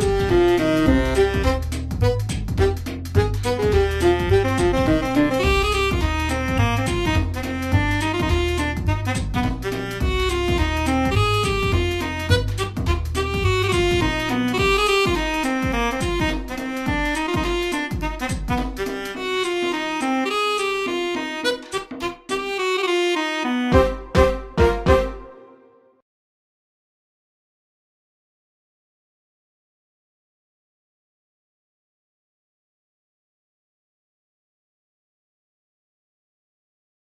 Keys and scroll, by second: 6.9 space, 16.0 space, 16.7 space, 28.1-33.6 typing, 36.5 space.